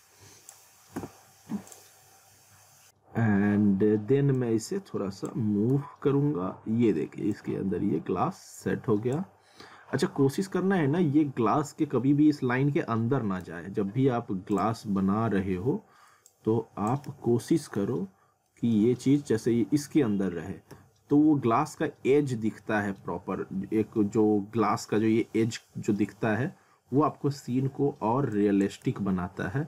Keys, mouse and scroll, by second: 1.0 w, 1.7 click, 4.4 click, 5.7 z, 7.3 click, 9.8-10.2 scroll up 1, 13.4 z, 14.5 click, 17.1 ctrl+z, 17.6 middle click, 17.9-18.3 scroll up 1, 18.5 middle click, 18.6 scroll up 1, 20.7 z, 21.3 scroll up 1, 22.3 z, 22.8 middle click, 23.2-23.6 scroll up 1, 26.4 scroll up 1, 28.3 click, 28.9 ctrl+z.